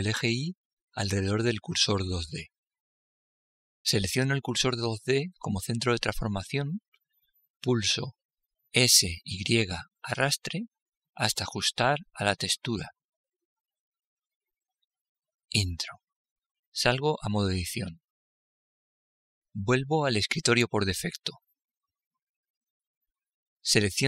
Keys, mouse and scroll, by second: 3.4-10.1 right drag, 10.1 s, 19.7 Tab.